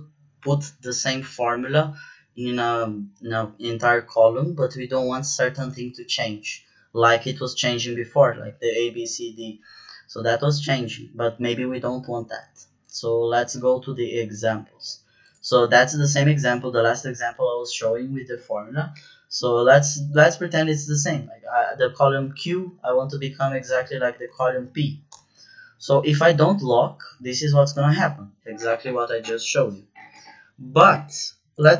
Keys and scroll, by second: 18.9 =, 25.0 Return, 30.1 ctrl+z.